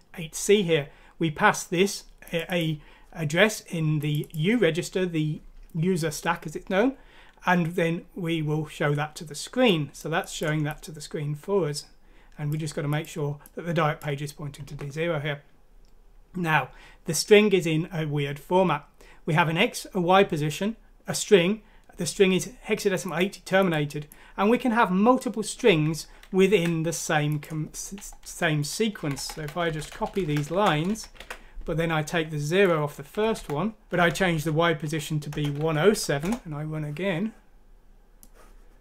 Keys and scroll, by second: 26.5 ctrl+c, 28.2 Left, 28.9 Right, 29.1 Right, 29.3 Right, 29.6 End, 29.9 Up, 30.0 typing, 30.5 ctrl+c, 30.7 Down, 30.9 Down, 31.2 ctrl+v, 33.1 Delete, 33.3 Delete, 34.0 ctrl+z, 34.1 ctrl+z, 34.3 ctrl+z, 34.8 ctrl+z, 35.5 typing, 36.1 F6, 36.2 Return, 36.7-37.9 typing.